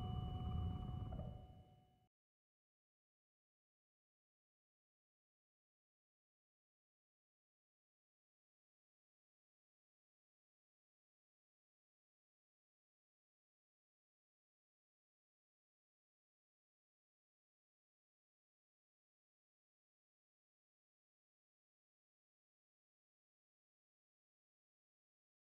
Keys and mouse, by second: 2.9 click, 3.7-4.8 middle drag, 6.5 r, 9.7 Return, 13.0-14.8 middle drag, 14.8 s, 17.7 middle click, 18.7-20.5 middle drag, 21.2-22.8 drag, 22.8-25.4 middle drag, 24.5 s.